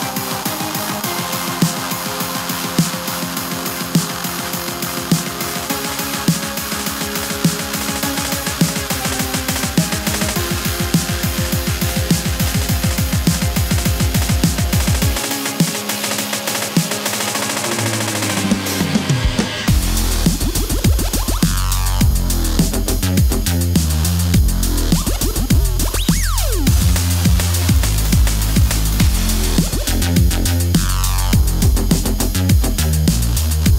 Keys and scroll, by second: 3.1 3, 6.9 u, 9.9 super+s, 10.6-11.7 typing, 12.6 Home, 14.8 u, 15.8 space, 17.1 super+s, 22.0 super+s, 22.3 super+Tab, 26.3 super+s, 27.4 super+s, 27.6 super+s, 27.8 u, 29.1 super+z, 29.9 Return, 30.1-30.9 typing, 33.4 super+Tab.